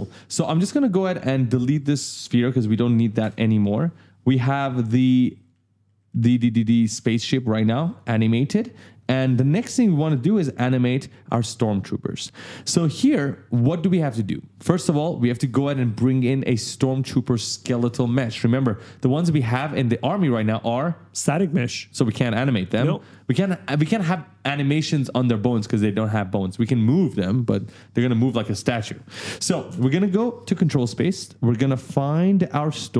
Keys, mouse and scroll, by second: 0.0-0.9 typing, 1.8 click, 3.0 BackSpace, 5.2 right click, 6.7 d, 6.7 right click, 7.7 click, 8.8 right click, 8.9 a, 9.3 s, 11.8 right click, 12.1 w, 12.5 e, 29.5 ctrl+space, 31.5 scroll down 1, 32.4 click.